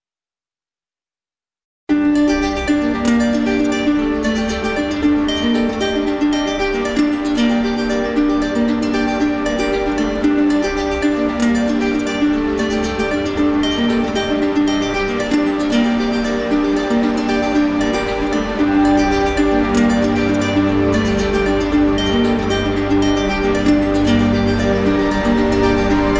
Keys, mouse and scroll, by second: 1.8 click, 2.1 ctrl+z, 3.7 right click, 5.4 right click, 6.8 click, 10.6 click, 11.7 ctrl+z, 11.7 click, 13.0 right click, 15.9 click, 21.1-22.3 drag, 22.9-24.0 drag, 24.9 click.